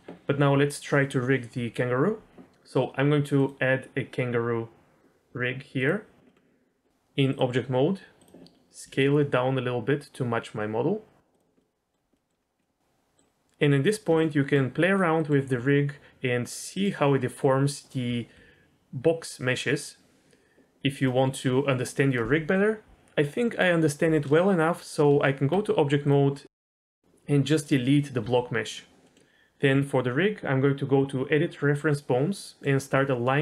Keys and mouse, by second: 3.4-5.9 drag, 6.3 middle click, 7.4-8.2 drag, 8.9 s, 11.4 s, 11.6 middle click, 12.1 middle click, 12.6 middle click, 14.1 Tab, 15.2 middle click, 15.4 r, 17.2 middle click, 17.8 click, 18.1 r, 20.9 right click, 25.1 Tab, 26.4 middle click, 28.2 x, 29.0 middle click, 29.7 click, 31.9 click, 32.4 middle click.